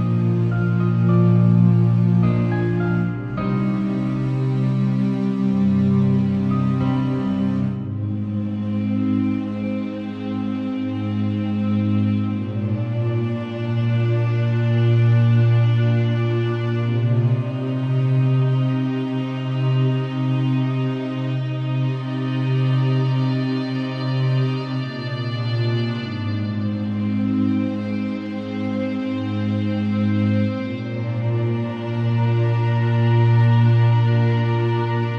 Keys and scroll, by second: 1.0 super+c, 1.6 ctrl+super+Tab, 2.2 ctrl+Tab, 2.6 v, 6.2 z, 9.7 super+t, 13.0 alt+shift+Return, 13.4 Left, 15.2 ctrl+Tab, 16.1 ctrl+super+Tab, 16.2 super+w, 17.7 ctrl+Tab, 19.2 m, 21.8 super+c, 22.6 super+w, 24.0 v, 29.4 z, 30.9 v, 31.7 super+Tab.